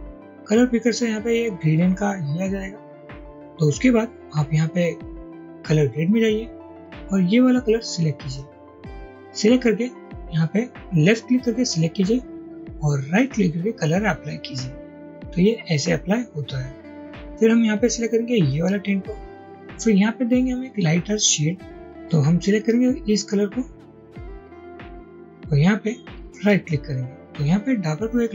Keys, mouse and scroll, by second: 13.3 right click, 26.5 right click.